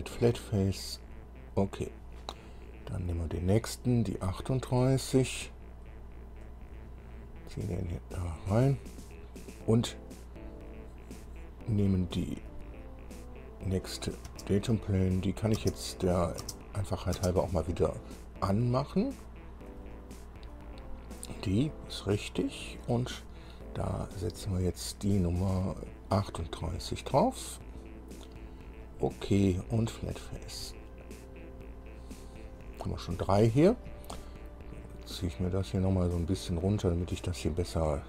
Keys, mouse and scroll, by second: 1.2 click, 3.0 scroll down 1, 4.7 scroll up 1, 6.6-8.7 drag, 12.7 click, 14.5 space, 15.4 click, 15.8 space, 16.3 click, 16.6 space, 17.1 click, 17.4 space, 19.9 click, 24.2 click, 25.8 click, 27.6 click, 29.0 click, 30.3 click, 36.1-37.6 drag.